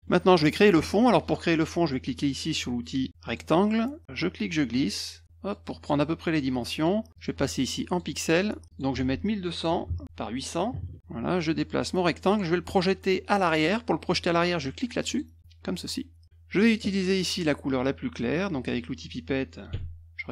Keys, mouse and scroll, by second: 0.0 middle click, 3.2 click, 4.5 click, 6.7 click, 7.1 click, 7.9 click, 8.7 click, 9.0 ctrl+a, 9.7-11.2 typing, 10.0 Tab, 11.2-12.3 drag, 15.1 click, 15.4 click, 19.7 d.